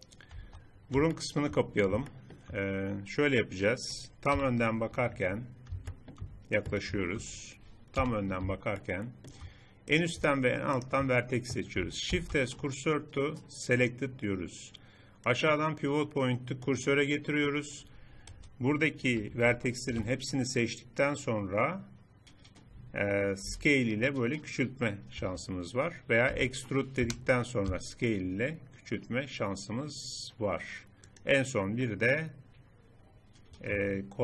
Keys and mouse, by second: 0.5 Tab, 4.3 KP_1, 8.0 KP_1, 12.1 shift+s, 17.1-19.8 middle drag, 23.5 s, 26.3 e, 27.7 s, 33.2 click.